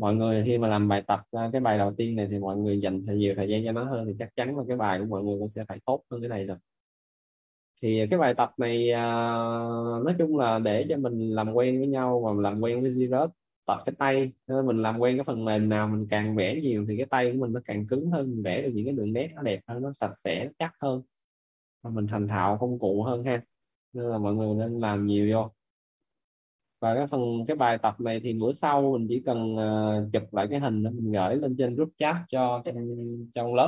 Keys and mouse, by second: 3.4 right click, 5.0 click, 18.8 right click, 21.7 click, 22.7 right click, 23.3 click, 27.4 right click.